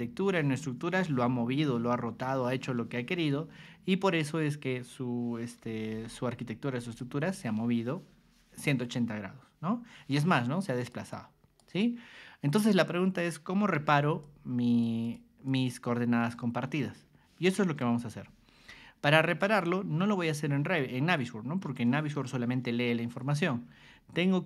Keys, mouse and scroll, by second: 5.6 o, 6.3 ctrl+click, 10.6 click, 11.1 click, 13.7 r, 14.2 click, 15.0 click, 15.4 click, 17.8 Escape, 19.3 click, 23.5 alt+Tab.